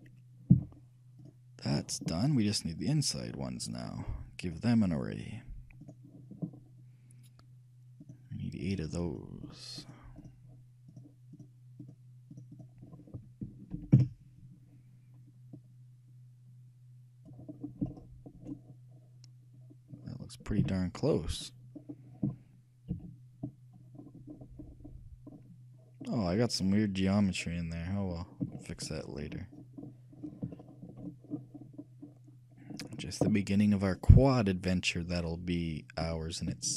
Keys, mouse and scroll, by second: 0.7 z, 3.0-4.8 right drag, 4.8-6.5 drag, 8.2-14.5 drag, 15.7-17.6 drag, 17.7-23.0 middle drag, 20.8 shift+z, 23.1 KP_3, 23.2-26.0 middle drag, 26.5-27.8 middle drag, 28.2-28.8 scroll up 1, 28.8-30.0 shift+middle drag, 32.1-35.7 shift+middle drag.